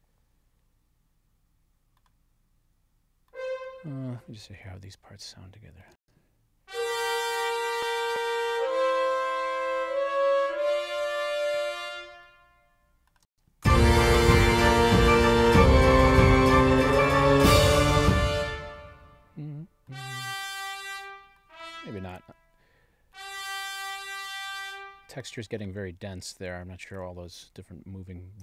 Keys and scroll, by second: 5.9 space, 11.3 space, 13.2 space, 17.9 space.